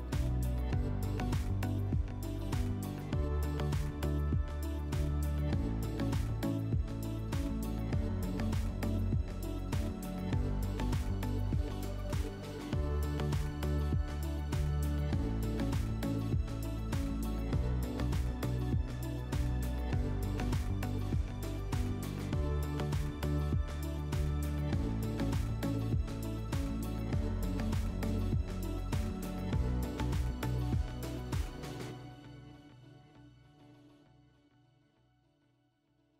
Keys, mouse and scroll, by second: 0.8 click, 2.2 click, 4.2 click, 6.2 click, 7.5 click, 10.8 click, 12.3 click, 16.0 click, 17.0 click, 18.0 click, 21.5 click, 22.8 click, 25.2-27.0 drag, 28.1 click, 29.5 click.